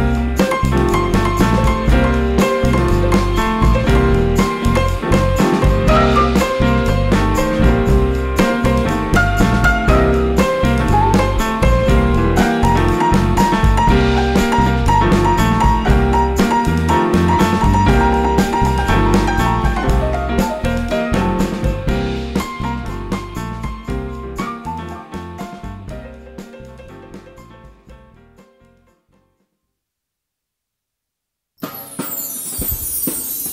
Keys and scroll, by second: 1.4 super+z, 6.4 super+x, 8.6 super+z, 10.7 super+z, 14.3 super+z, 15.1 super+z, 17.3 super+z, 18.0 super+z, 20.2 super+z, 20.4 super+z, 21.5 super+z, 23.5 super+x, 24.8 super+x, 26.1 super+z, 28.1 super+z, 28.4 super+z.